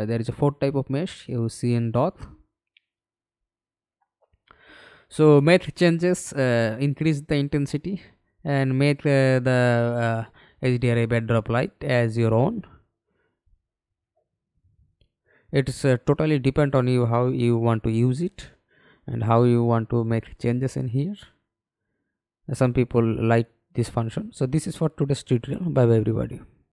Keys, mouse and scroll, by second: 1.8-2.1 scroll down 3, 4.1-5.1 scroll down 3, 5.1-6.6 scroll down 6, 6.6-8.5 scroll down 3, 8.6 scroll up 1, 8.9 scroll down 1, 8.9-10.1 scroll up 4, 10.1-12.3 scroll up 3, 12.3 scroll up 1, 12.4 scroll down 1, 12.5 scroll up 1, 12.6 scroll down 1, 12.6-13.4 scroll up 6, 13.8-17.4 scroll up 5, 20.4 middle click, 20.8-21.4 scroll up 4, 21.7 scroll down 1, 24.3 scroll down 2.